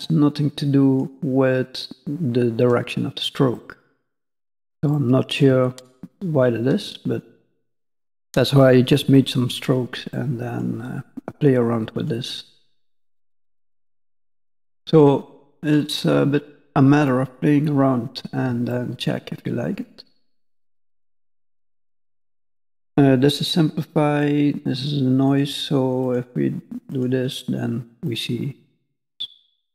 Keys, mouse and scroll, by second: 3.5 middle click, 4.9 shift+middle click, 5.8 middle click, 10.1 middle click, 10.8-11.6 scroll up 1, 11.9 click, 13.2 middle click, 15.7 click, 17.0 middle click, 18.7 shift+middle click, 19.2 middle click, 24.2 click, 26.0 click, 26.9 click, 28.0 middle click.